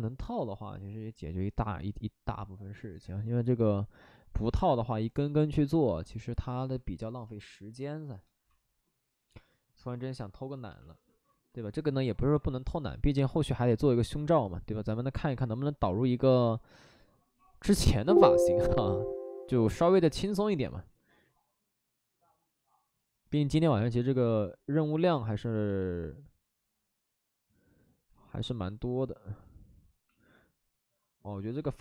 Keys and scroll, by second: 31.3 alt+s.